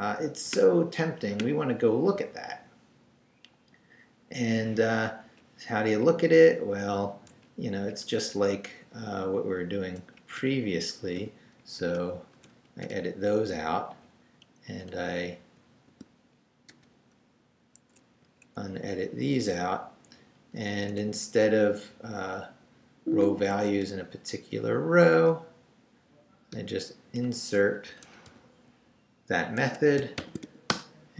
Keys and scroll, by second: 5.2 Up, 5.9 Down, 7.3 Down, 7.7 Up, 8.0 Left, 10.2 Up, 11.2 i, 11.8 shift+3, 12.2 shift+Left, 12.5 Down, 12.9 shift+3, 13.9 shift+Down, 14.7 Down, 14.9 Left, 15.9 x, 16.7 BackSpace, 17.8 Escape, 18.2 Right, 18.8 x, 19.0 Down, 19.4 x, 19.8 Right, 21.2 Up, 21.5 Right, 23.4 a, 23.8 BackSpace, 26.5 i, 27.7 BackSpace, 28.3 super+v, 29.6 super+Escape, 30.0-30.9 typing.